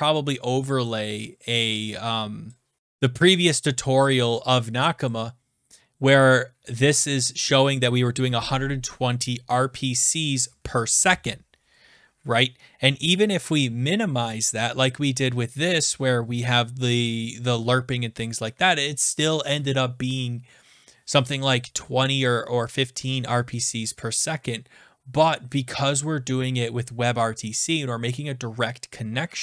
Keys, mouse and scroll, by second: 0.8 click, 2.4 click, 2.8 click, 5.0 click, 12.7 click, 12.8 click, 13.5 click, 19.2 click, 19.2 Down, 19.6 Right, 19.6 click, 20.2 click, 20.5 Up, 20.6 click, 20.7 Left, 23.3 click, 25.1 Down, 25.1 click.